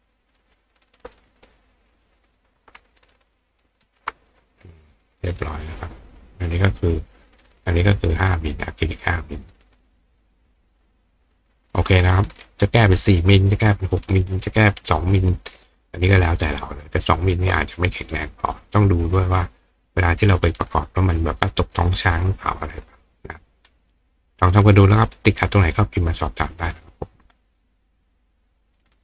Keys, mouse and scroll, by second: 0.4 click, 2.0-3.8 drag, 3.1-5.4 ctrl+right drag, 4.1 click, 4.9 click, 16.3 right click.